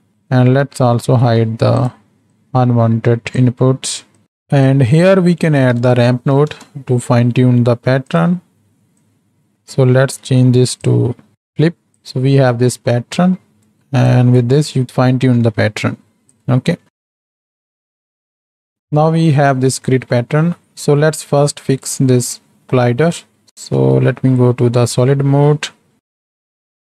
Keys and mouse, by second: 1.1 ctrl+h, 2.3-3.4 drag, 4.7-8.2 drag, 9.0-9.5 drag, 10.9-11.3 drag, 11.3 middle drag, 11.9 click, 12.6 middle click, 14.2-16.9 drag, 17.6 right click, 18.0 middle click, 18.2 middle click, 18.4 middle click, 18.6 click, 23.0 right click, 23.5 ctrl+space, 24.0 z, 25.9 shift+s.